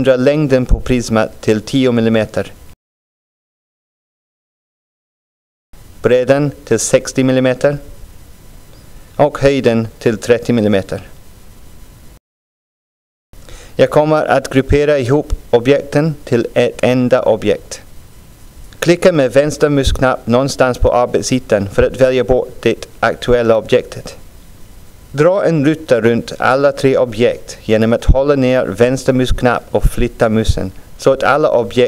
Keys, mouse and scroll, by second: 2.9-4.9 drag, 6.4-9.1 drag, 11.2-13.6 drag, 18.3-20.8 drag, 22.1-31.8 drag.